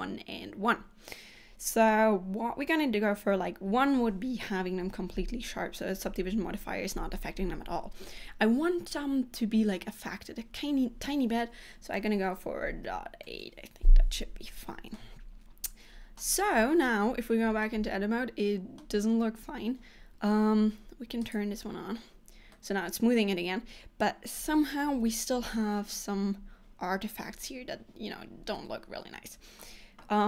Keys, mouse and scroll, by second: 15.1 middle click, 16.6 Tab, 17.8 middle click, 19.5 scroll down 1, 21.5 click, 22.6 middle click, 28.7 middle click.